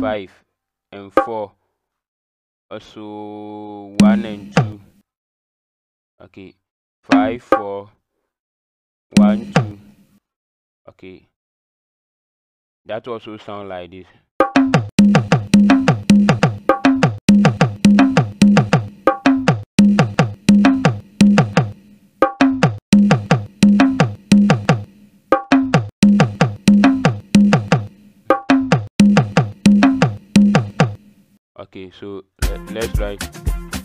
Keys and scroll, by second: 1.1 KP_4, 3.9 KP_1, 4.5 KP_2, 7.1 KP_5, 7.5 KP_4, 9.1 KP_1, 9.5 KP_2, 14.4-30.8 typing.